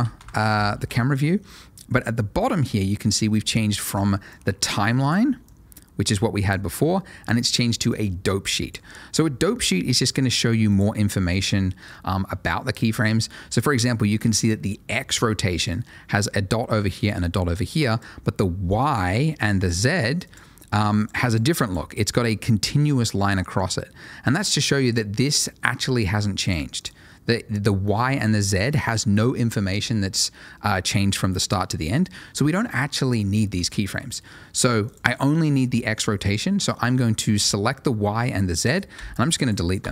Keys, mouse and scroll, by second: 0.7 space, 3.9 space, 4.3 click, 5.4 click, 16.1 click, 21.2 double click, 26.4 click, 26.7 double click, 33.6 click, 38.9 Delete, 39.4 click, 39.8 Delete.